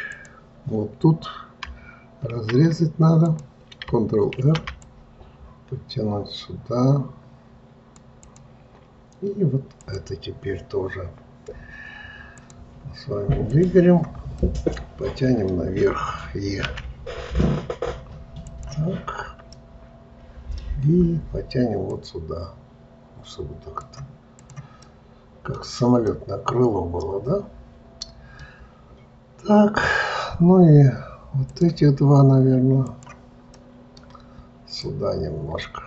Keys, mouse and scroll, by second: 0.0 click, 2.3 ctrl+e, 9.8 click, 12.3 click, 13.4 click, 14.3-16.6 middle drag, 16.6 e, 18.9-19.5 scroll down 2, 19.5-21.9 middle drag, 21.9 click, 24.4 click, 24.8-29.1 middle drag, 31.4 click, 32.8 click, 33.5-34.8 middle drag, 34.8 click.